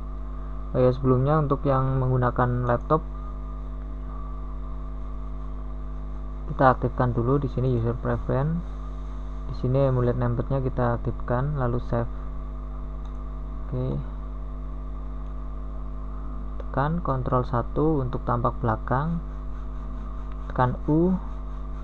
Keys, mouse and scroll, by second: 4.4 ctrl+KP_1, 19.1 middle click, 19.6 middle click.